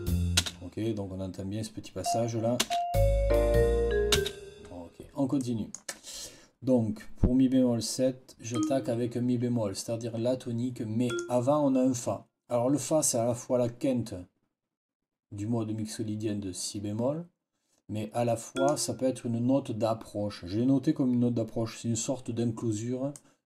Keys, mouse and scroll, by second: 0.3 space, 1.9 click, 2.5 space, 4.0 space, 5.3 click, 8.4 click, 11.0 click, 18.4 click, 23.0 click, 23.3 click.